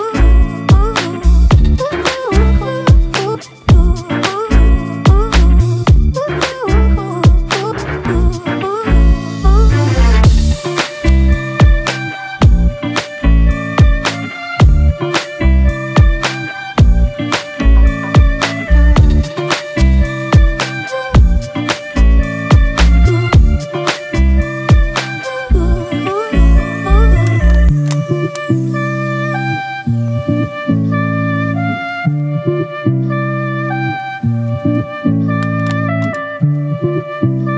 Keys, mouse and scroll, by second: 1.9 Return, 2.1 ctrl+=, 6.2 Down, 6.3 Down, 7.7 Down, 7.9 Left, 35.9 ctrl+y.